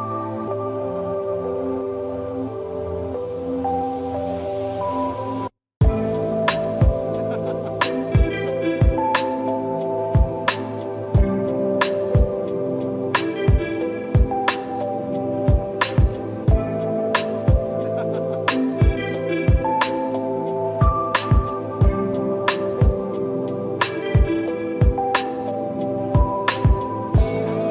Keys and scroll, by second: 2.9 space, 4.4 space, 6.6 space, 8.5 space.